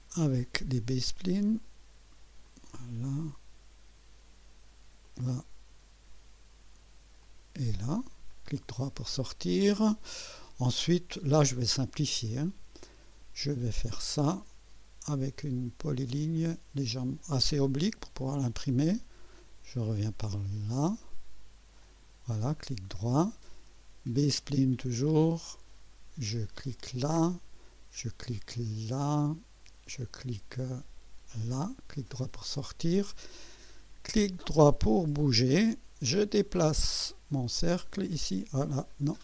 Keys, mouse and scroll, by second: 2.5 click, 5.0 click, 7.2 click, 8.3 right click, 14.3 click, 16.4 click, 18.2 click, 21.8 click, 22.6 right click, 24.1 click, 26.8 click, 29.1 click, 31.3 click, 32.0 right click, 34.4 right click, 37.1 click, 38.9 right click.